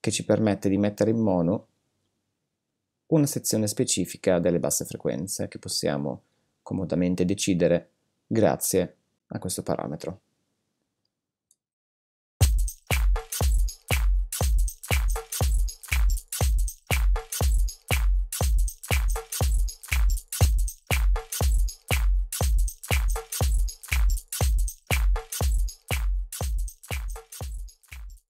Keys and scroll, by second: 12.3 space.